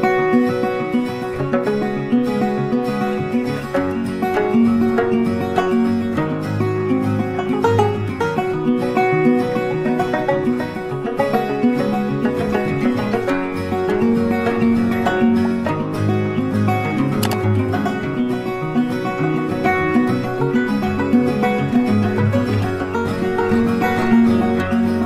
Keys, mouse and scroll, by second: 3.6 space, 5.1 alt+scroll down 1, 5.3 alt+scroll up 1, 5.4 alt+scroll down 1, 5.7 space, 6.7 double click, 6.9 ctrl+space, 7.0 ctrl+click, 7.1 ctrl+space, 7.4 ctrl+double click, 8.5 ctrl+[, 8.6 ctrl+[, 10.0 space, 10.4 ctrl+click, 12.3 ctrl+z, 14.3 Delete, 14.7 double click, 17.0 ctrl+space, 17.1 ctrl+click, 18.2 shift+click, 18.5 ctrl+z, 20.8 Delete, 22.7 ctrl+space, 22.8 ctrl+click, 22.9 ctrl+space, 24.3 alt+scroll down 1.